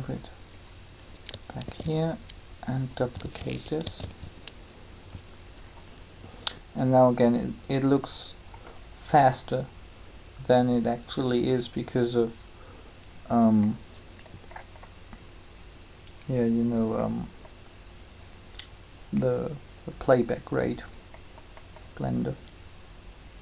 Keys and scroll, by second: 1.6 shift+d, 3.8 alt+a.